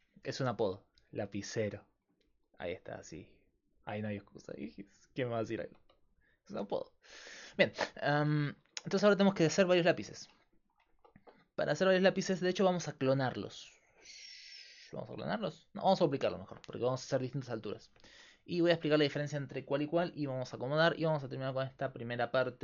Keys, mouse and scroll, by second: 0.0-22.6 typing, 0.5 middle click, 3.8-5.7 right drag, 8.3-9.7 middle drag, 20.3-22.6 middle drag.